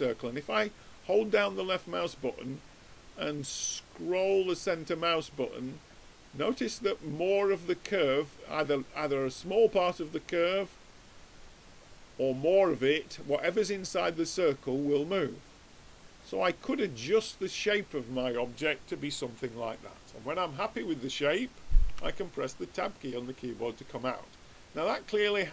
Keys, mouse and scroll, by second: 20.4 middle click, 21.9 Tab.